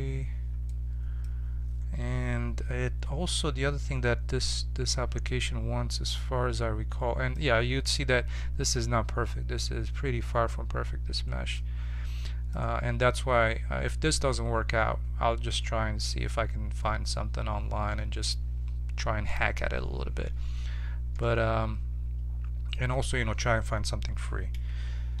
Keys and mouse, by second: 4.8 1, 6.2-25.2 middle drag.